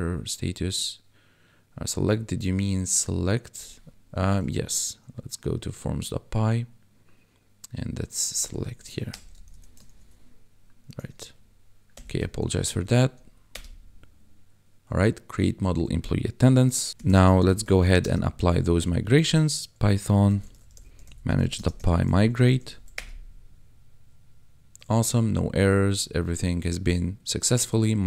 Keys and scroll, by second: 4.2 ctrl+`, 8.8 Left, 9.1 BackSpace, 9.4 shift+s, 11.1 ctrl+`, 11.9 ctrl+l, 13.5 Return, 16.9 Down, 16.9 p, 17.4 h, 17.7 n, 18.0 space, 20.3-22.6 typing, 22.9 Return.